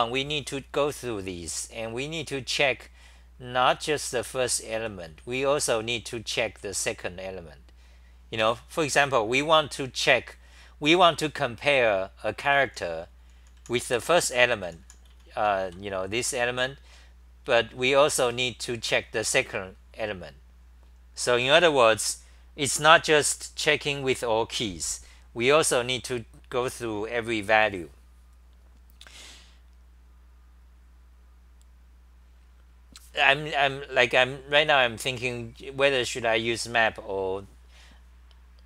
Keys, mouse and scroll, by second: 1.0-2.4 typing, 3.7-6.5 typing, 3.9 scroll, 5.1 ctrl+g, 8.4 ctrl+g, 12.4 ctrl+g, 12.4-15.8 typing, 17.5-18.3 typing.